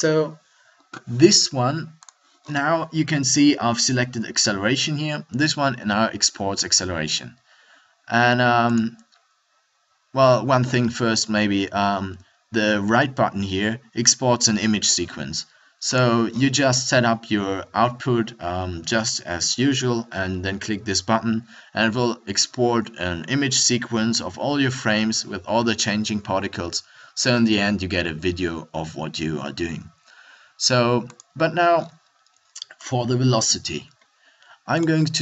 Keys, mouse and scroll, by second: 1.6 middle click, 10.6-15.9 middle drag, 17.6-31.0 middle drag, 34.9-35.2 middle drag.